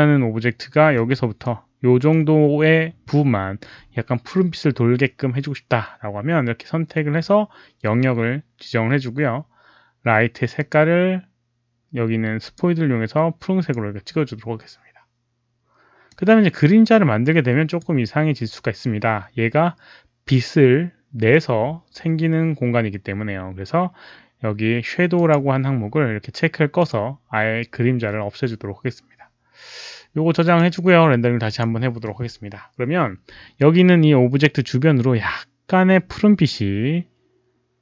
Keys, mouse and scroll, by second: 1.0 r, 1.4 middle click, 10.5 click, 12.4 click, 13.5 click, 16.0-17.7 drag, 25.1 click, 26.7 click, 30.4 click, 31.4 click.